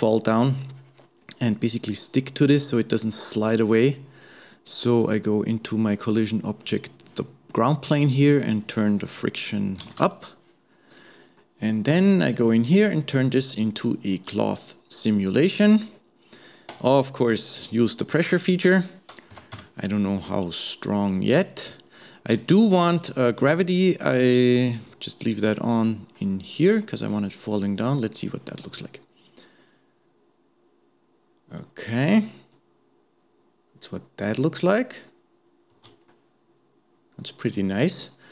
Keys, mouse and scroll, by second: 0.4 click, 5.0-8.1 drag, 8.4-11.0 drag, 11.4-12.6 middle drag, 12.6 click, 13.8-14.1 scroll down 2, 15.1 scroll down 8, 16.8 click, 17.5-18.7 scroll down 1, 18.7-20.6 drag, 20.6-21.8 scroll down 2, 22.0-25.0 middle drag, 25.4 click, 25.8-28.2 middle drag, 28.2 click, 28.6 space, 35.7 space, 36.1-38.3 middle drag.